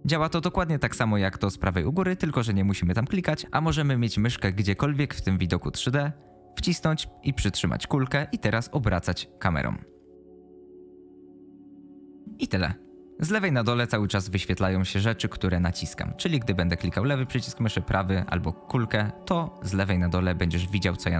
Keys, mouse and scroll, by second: 6.7-12.2 middle drag, 16.7 click, 17.1 click, 17.6-18.1 right drag, 18.2 middle click, 18.7 middle click.